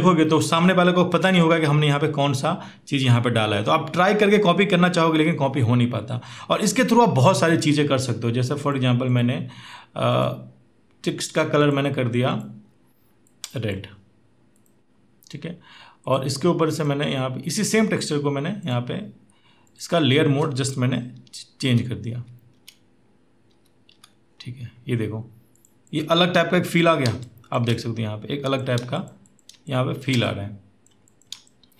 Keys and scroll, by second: 21.1 Down, 21.3 Down, 21.9 Down, 22.3 Up, 23.3 Up, 23.7 Down, 27.0 space, 29.4 space.